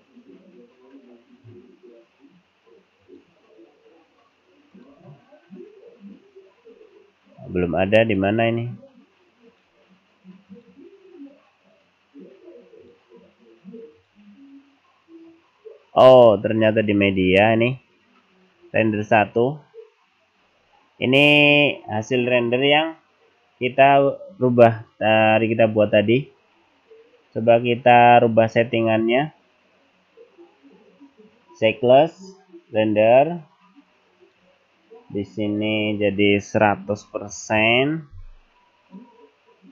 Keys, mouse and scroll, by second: 34.2 click, 35.5 click, 37.5 KP_0.